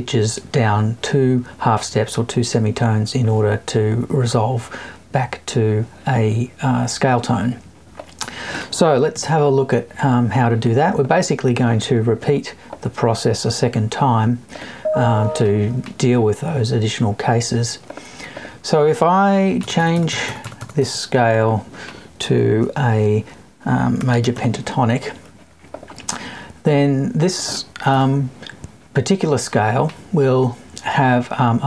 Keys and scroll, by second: 9.1 Left, 19.6 BackSpace, 27.9 BackSpace.